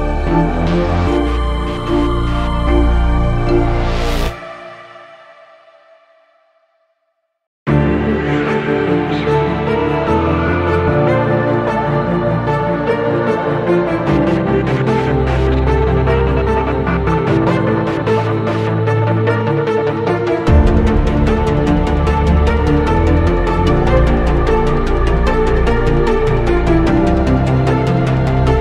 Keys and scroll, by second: 3.3 Delete, 7.1 F3, 7.5 Escape.